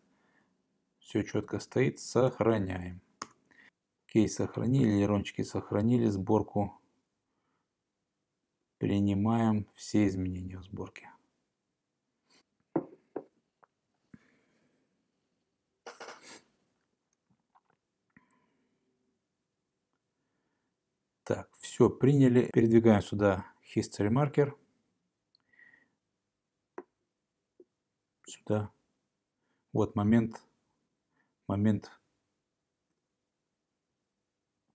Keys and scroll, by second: 2.3 super+s, 3.3 Return.